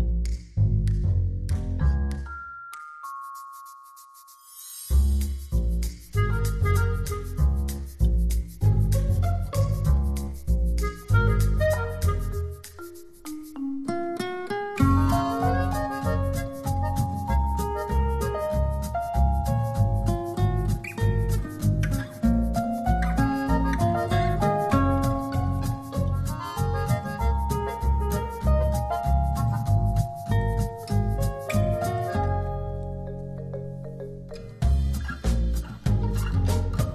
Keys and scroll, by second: 25.5 space, 28.5 space.